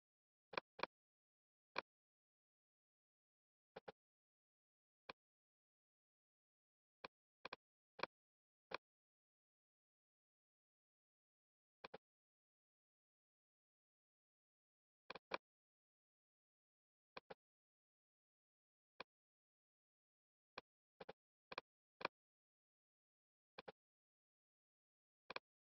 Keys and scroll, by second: 12.5 ⟲, 14.0 super+z, 25.0 super+z.